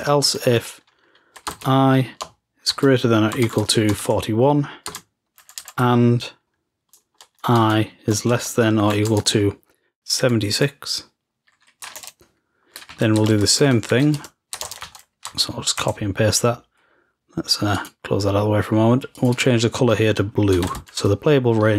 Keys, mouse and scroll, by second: 13.3 shift+Home, 13.8 ctrl+c, 14.7 ctrl+v, 17.8 click, 18.1 click, 19.2 click, 19.6 click.